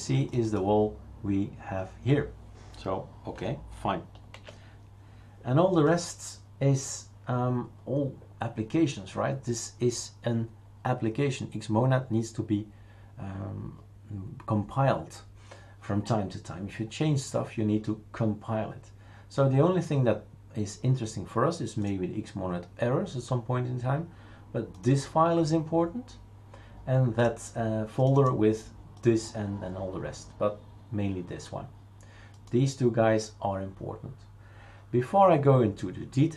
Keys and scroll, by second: 4.3 shift+super+q.